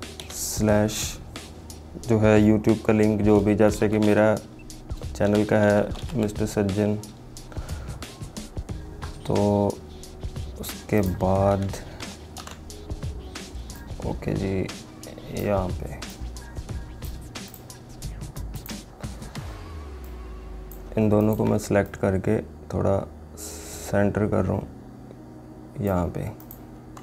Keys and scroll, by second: 12.5 ctrl+t.